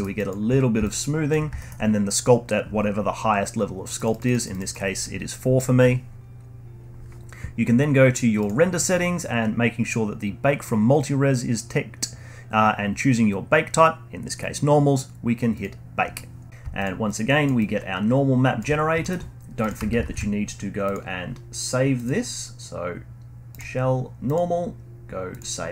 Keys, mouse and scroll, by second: 0.2-1.6 alt+drag, 1.6-4.0 alt+middle drag, 4.0-7.7 drag, 8.4 click, 9.0 scroll down 2, 15.5 click, 16.8 click, 17.1-17.4 drag, 17.6-18.7 alt+drag, 18.7 scroll up 1, 19.0 alt+middle click, 19.6 click, 20.0 ctrl+alt+s, 22.0 click, 24.3-25.6 drag.